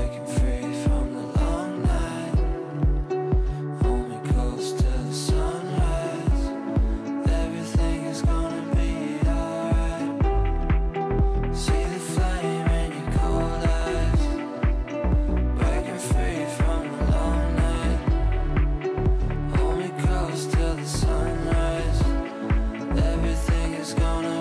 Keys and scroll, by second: 16.4 ctrl+q.